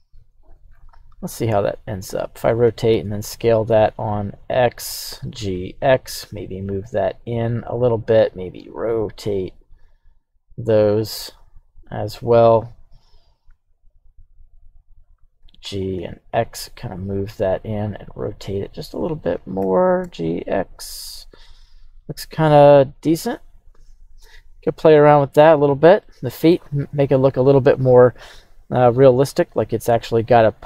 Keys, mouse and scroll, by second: 0.9 r, 2.0 click, 2.6 s, 2.9 x, 4.3 click, 5.1 g, 5.5 x, 7.5 click, 8.0 right click, 8.7 r, 11.9-13.5 drag, 13.5 s, 15.0 click, 15.4 g, 16.0 x, 17.4 click, 17.8 r, 19.2 click, 19.6 g, 20.0 x, 21.2-22.3 drag, 22.5-25.0 middle drag, 25.2 right drag, 26.0-26.5 middle drag, 26.6-27.0 scroll down 2, 27.0-28.1 middle drag, 28.4-29.1 scroll up 1, 29.1-29.8 scroll up 1.